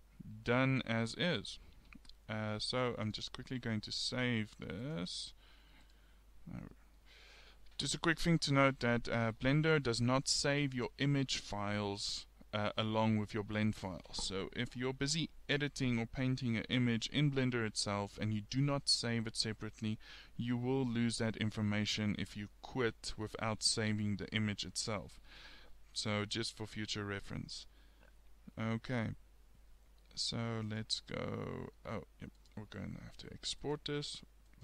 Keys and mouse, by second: 3.3 click, 6.4 click, 7.2-9.8 middle drag.